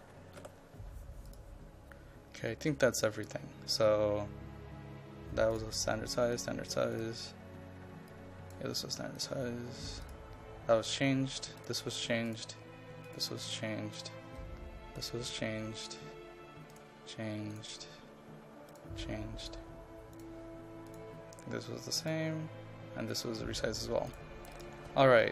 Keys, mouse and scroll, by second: 0.2 KP_6, 0.4 KP_4, 1.3-25.3 drag.